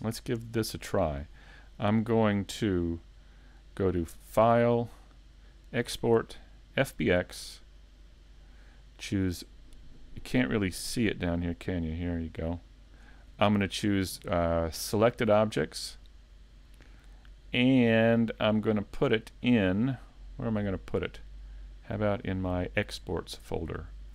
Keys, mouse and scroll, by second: 4.3 click.